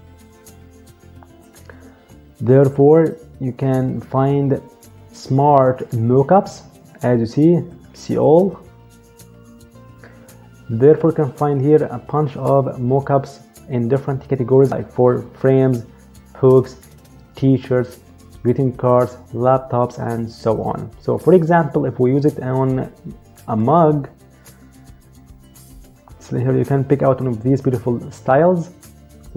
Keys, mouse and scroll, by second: 7.5 click, 23.1 click.